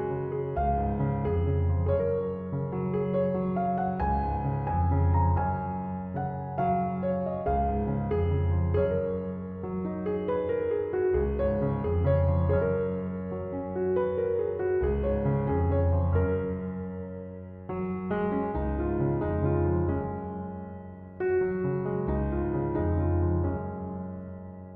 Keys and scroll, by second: 0.9 space, 20.8 space.